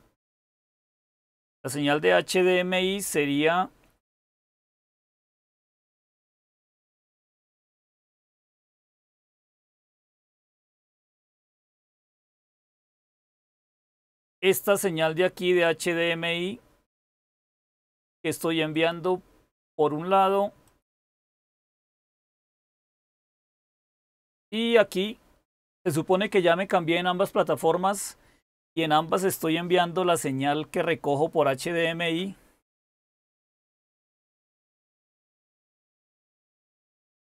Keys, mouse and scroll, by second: 12.1-37.2 drag.